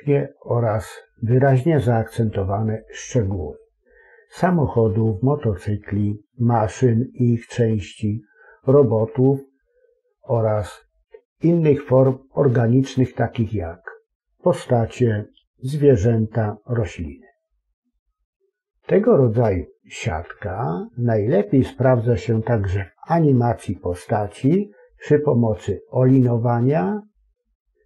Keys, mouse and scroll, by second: 0.3 click, 1.0 middle click, 1.0 click, 1.5 ctrl+r, 1.5 middle click, 1.7 click, 2.2 middle click, 2.4 click, 2.6 ctrl+r, 2.8 click, 2.8 middle click, 3.4 click, 3.7 ctrl+KP_Add, 4.2 click, 4.3 right click, 5.3 middle click, 5.5 ctrl+r, 5.8 click, 6.0 right click, 6.3 middle click, 6.6 alt+a, 6.7 alt+shift+right click, 6.9 alt+shift+click, 7.4 middle click, 7.7 right click, 8.1 s, 8.3 click, 8.5 middle click, 8.9 click, 8.9 s, 9.5 ctrl+KP_Add, 9.6 click, 9.6 s, 10.4 e, 11.1 click, 11.4 ctrl+r, 11.6 click, 12.1 ctrl+r, 12.4 click, 12.6 right click, 12.8 middle click, 13.2 g, 13.7 click, 13.8 middle click, 14.1 click, 14.3 ctrl+KP_Add, 14.6 i, 15.0 click, 15.1 middle click, 15.4 e, 15.8 click, 16.2 s, 16.3 scroll up 2, 16.4 middle click, 16.5 scroll down 2, 16.6 middle click, 16.9 x, 17.5 middle click, 17.8 Tab, 18.0 scroll up 2, 18.1 middle click, 18.4 Tab, 18.8 ctrl+r.